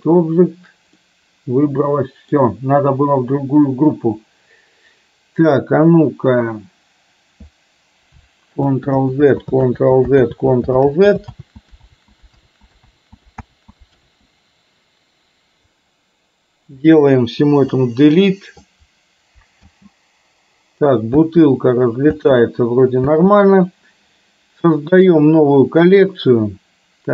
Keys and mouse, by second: 1.0-2.4 middle drag, 8.6 ctrl+z, 9.4 ctrl+z, 9.8 ctrl+z, 10.3 ctrl+z, 10.9 ctrl+z, 11.4 ctrl+z, 11.9 ctrl+z, 12.5 ctrl+z, 13.1 ctrl+z, 13.5 ctrl+z, 14.1 ctrl+z, 17.8 Delete, 19.6 space, 21.3 space, 22.3 space, 23.2 space.